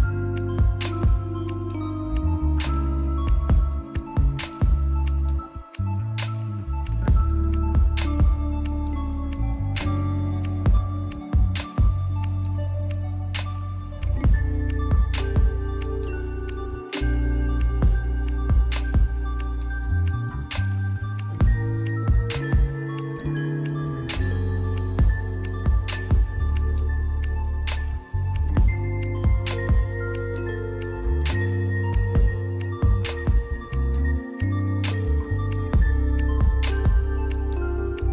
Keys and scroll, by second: 0.0 ], 4.5 scroll down 1, 4.7 scroll up 1, 5.8 scroll down 1, 5.9 scroll up 1, 8.1 ctrl+z, 9.3 ctrl+z, 11.5 [, 13.7 scroll up 1, 16.0 scroll up 1, 17.4 [, 18.1 ctrl+z, 18.4 b, 19.0 ctrl+z, 20.4 ctrl+z, 20.8 ctrl+z, 21.8 ctrl+z, 36.5 ctrl+z, 36.6 [.